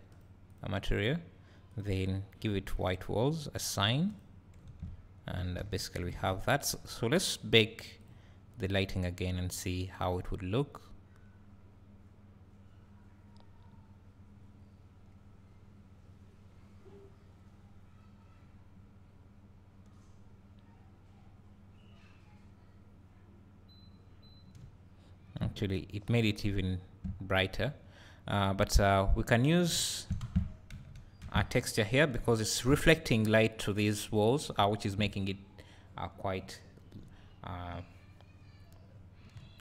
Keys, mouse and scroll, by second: 0.6 click, 2.8-25.9 drag, 4.7 Tab, 5.6 alt+a, 24.6 `, 24.8 `, 25.7 scroll up 1, 26.1 scroll down 1, 26.1-28.9 drag, 26.4 `, 29.9 `, 30.3 Tab, 30.7 a, 31.2 Tab, 33.2 `, 38.3 scroll down 1, 38.9 scroll up 1.